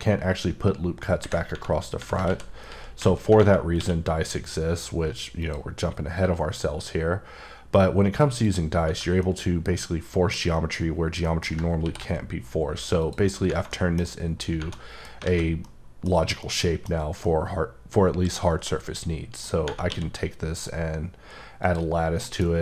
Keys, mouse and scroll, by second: 2.3 ctrl+z, 3.8 q, 5.4 click, 7.0-7.3 scroll up 1, 8.4 click, 9.2 middle click, 11.8 ctrl+r, 12.1 scroll up 1, 13.0 click, 13.3 right click, 13.7 middle click, 14.0-14.6 scroll up 1, 14.7 middle click, 15.2 a, 15.6 middle click, 16.4 middle click, 16.9-17.2 scroll down 1, 17.2 middle click, 19.9 q, 21.6 click, 22.0 scroll down 2, 22.2 middle click.